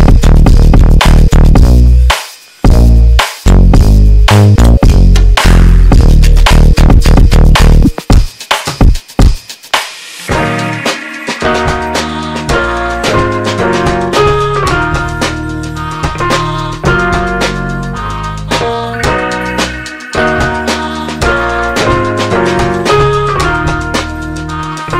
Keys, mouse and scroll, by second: 4.2 g, 7.5 ctrl+z, 10.1 g, 23.6 g.